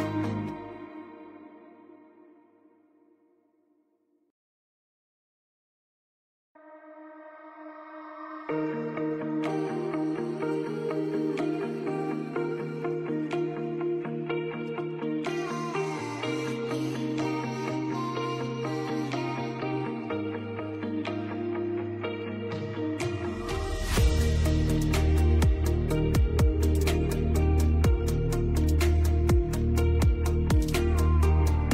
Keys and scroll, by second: 5.4 space, 8.9 F2, 14.2 space, 22.4 shift+F2, 22.7 Escape.